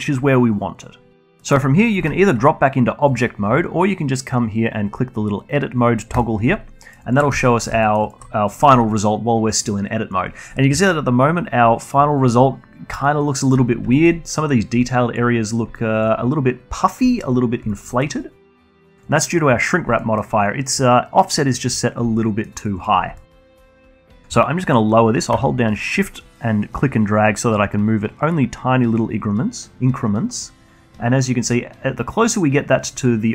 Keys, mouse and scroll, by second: 1.2 Tab, 4.1 click, 4.7 alt+middle click, 4.9 alt+click, 5.2 z, 5.7 alt+middle drag, 5.9-9.8 alt+drag, 10.9-11.6 alt+drag, 11.6 scroll up 1, 11.9 alt+middle click, 12.1-12.8 scroll up 1, 12.8-14.7 alt+drag, 14.7 scroll down 1, 15.0-15.3 alt+drag, 15.3 scroll down 1, 15.6 alt+click, 15.8-16.9 alt+middle drag, 16.9-17.2 drag, 17.2-17.9 scroll down 1, 17.9 alt+middle click, 18.4-19.6 scroll down 1, 19.6-20.1 scroll down 2, 20.1-24.1 alt+middle drag, 24.9-28.0 shift+drag.